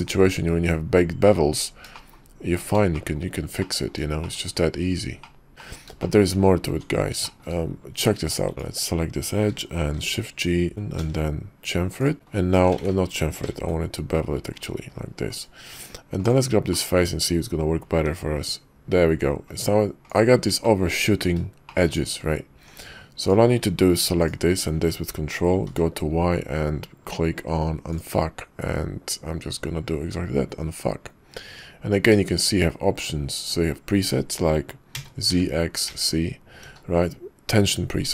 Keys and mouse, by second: 2.1 shift+middle click, 3.1 shift+middle drag, 3.7 middle click, 4.3 shift+middle click, 5.4 middle click, 6.0 shift+middle click, 6.7 Tab, 7.2 shift+middle click, 7.9 Tab, 8.5 Tab, 9.5 a, 9.5 3, 9.8 shift+g, 10.9 ctrl+b, 12.1 click, 12.8 ctrl+z, 13.5 ctrl+b, 15.7 Tab, 16.2 click, 16.7 click, 18.2 i, 20.7 shift+middle click, 22.5 Tab, 23.2 click, 25.6 y.